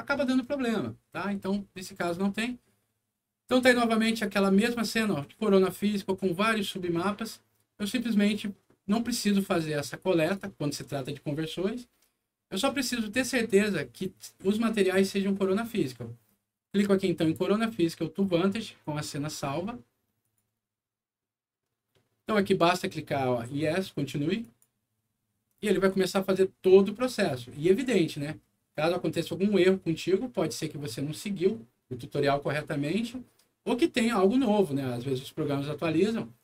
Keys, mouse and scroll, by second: 3.5 click, 10.1 click, 20.1 click, 24.3 click.